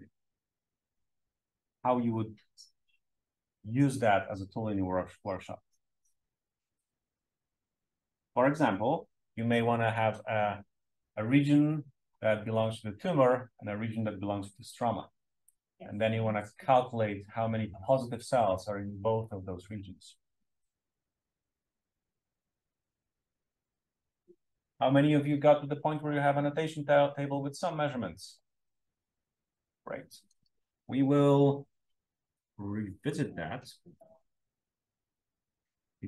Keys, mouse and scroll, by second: 32.5-33.0 scroll down 1, 33.0 scroll down 1.